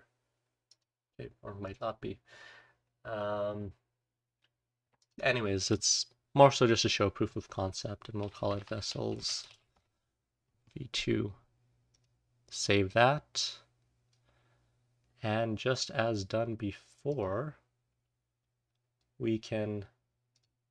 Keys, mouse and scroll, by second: 18.0-20.3 scroll down 1, 20.3 click, 20.3-20.7 scroll down 1.